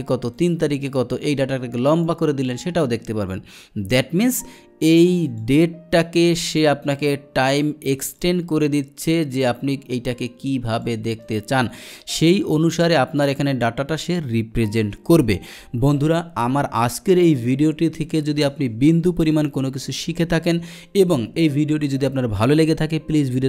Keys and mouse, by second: 0.4 click, 1.1-2.1 drag, 5.3 click, 8.0 click, 9.3 click, 10.8 click, 11.2 click, 12.1 click.